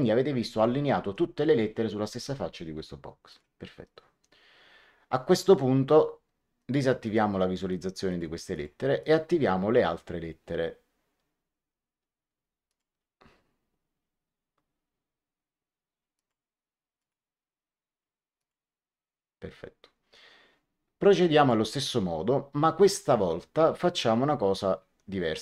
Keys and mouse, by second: 3.2 click, 6.5 click, 12.6 click, 16.1 click, 18.3 click, 21.3 click.